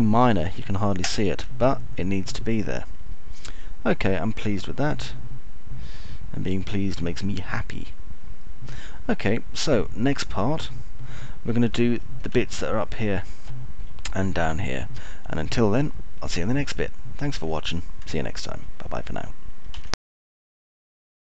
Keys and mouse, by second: 0.0 alt+middle click, 0.6-2.3 alt+middle drag, 2.6 alt+middle click, 4.3-9.3 alt+middle drag, 9.6-14.5 alt+middle drag, 14.6 middle click, 15.1 alt+middle click, 16.1 alt+middle click, 17.3-19.0 alt+middle drag, 19.5 alt+middle click.